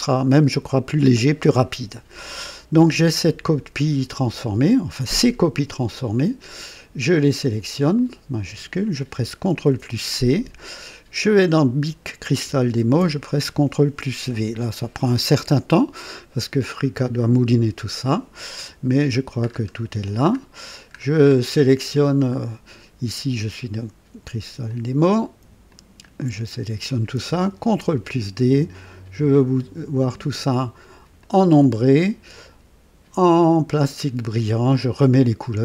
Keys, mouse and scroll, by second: 0.0 click, 3.9-4.3 scroll down 2, 5.5 click, 7.9 shift+click, 9.4 ctrl+c, 11.3 click, 12.7 ctrl+v, 18.7-19.0 scroll down 2, 19.4 scroll up 2, 20.2 scroll up 2, 20.9 scroll down 2, 21.3 scroll up 2, 21.7-22.5 scroll down 4, 24.6 click, 25.6 shift+click, 27.5 ctrl+d, 28.7 click, 31.1 click, 32.3 click, 33.7 click, 34.7 click.